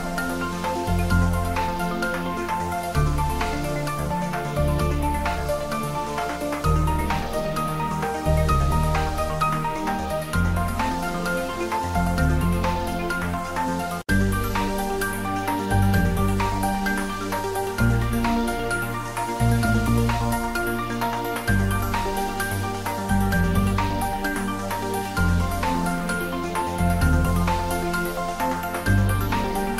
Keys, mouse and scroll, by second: 1.2 ctrl+r, 1.3 click, 2.3 middle click, 2.6 shift+middle click, 3.3 ctrl+middle click, 4.0 Tab, 4.8 ctrl+r, 5.1 click, 6.7 ctrl+r, 6.9 click, 7.9 ctrl+r, 8.2 click, 9.1 ctrl+r, 9.5 click, 10.3 middle click, 10.9 shift+middle click, 11.5 ctrl+r, 12.1 click, 12.9 ctrl+r, 13.5 click, 15.3 middle click, 16.2 ctrl+r, 16.4 click, 17.3 ctrl+r, 17.6 click, 18.3 Tab, 18.6 middle click, 19.2 ctrl+middle click, 19.8 middle click, 20.2 Tab, 21.0 ctrl+r, 24.8 click, 26.1 Tab, 26.4 ctrl+middle click, 27.0 Tab, 27.9 ctrl+middle click, 28.5 right click, 29.1 click, 29.5 middle click.